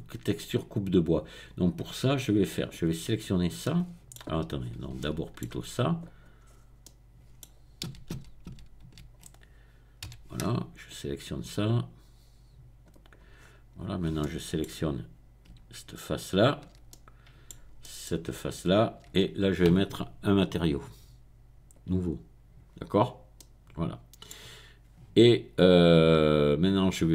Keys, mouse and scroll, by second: 0.4 click, 2.3 click, 3.1 click, 3.7 middle click, 4.6-5.0 scroll up 3, 5.0-6.0 shift+middle drag, 6.0 click, 6.4 middle click, 6.8-7.3 scroll up 2, 7.3 middle click, 7.9 a, 8.1 a, 8.5 a, 8.9 a, 10.2 c, 10.9-12.9 drag, 12.9 right click, 13.3-14.2 scroll down 1, 15.4 middle click, 16.3 shift+click, 16.7 shift+middle click, 17.0 middle click, 18.5 shift+click, 18.8 shift+middle click, 20.7 click, 21.7 click, 23.3-27.1 middle drag.